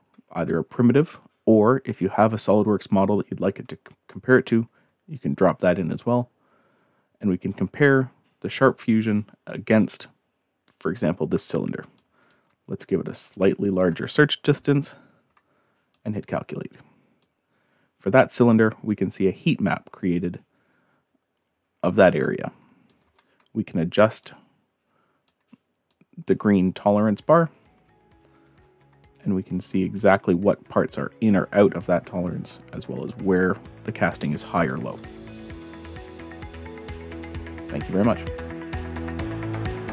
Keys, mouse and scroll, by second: 12.0 click, 13.3 click, 15.9 click, 17.2-22.9 drag, 24.2-25.3 drag, 25.9 click, 29.0-34.9 drag, 39.1 click.